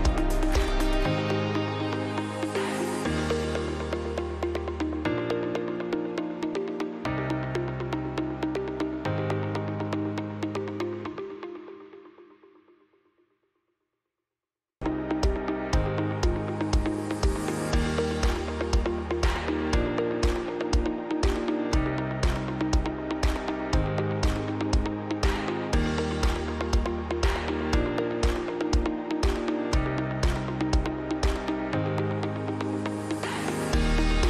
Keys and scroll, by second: 9.7 space, 13.1 space, 18.4 space, 18.7 Escape, 30.6 space, 31.8 Escape.